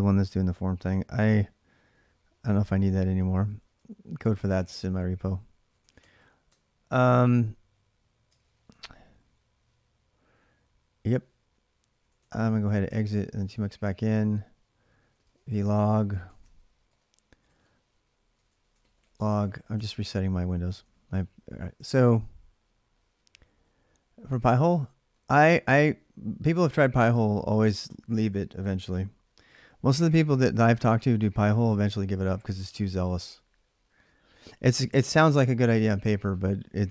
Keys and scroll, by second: 2.6 ctrl+c, 3.0-4.1 typing, 5.2-6.3 typing, 8.0-8.8 typing, 11.6-20.9 typing, 17.3 ctrl+a, 19.3 ctrl+a.